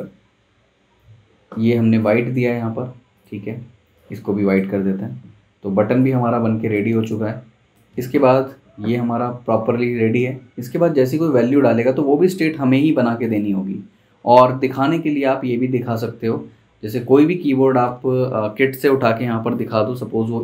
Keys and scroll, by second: 10.0 super+d.